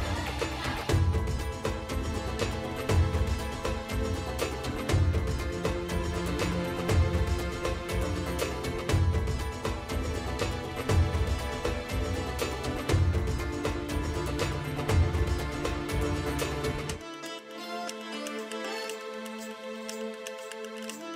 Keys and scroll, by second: 1.6 ], 2.9 space, 6.1 space, 9.1 space, 15.1 F9, 16.1-18.1 typing, 19.5 space, 20.6-21.1 typing, 20.7 F9.